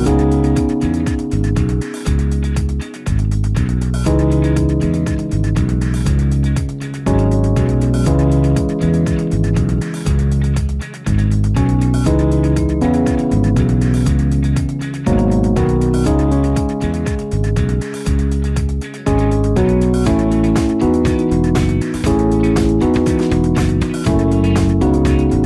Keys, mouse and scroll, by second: 4.3 0, 15.0 ctrl+d.